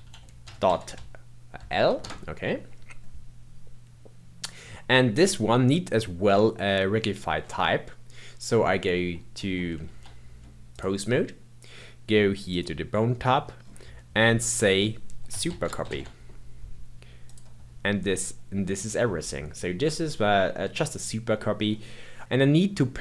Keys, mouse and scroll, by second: 8.9 Tab, 9.4 Tab, 12.4 click, 13.2-13.6 scroll down 2, 14.5-17.5 drag, 22.2 middle click.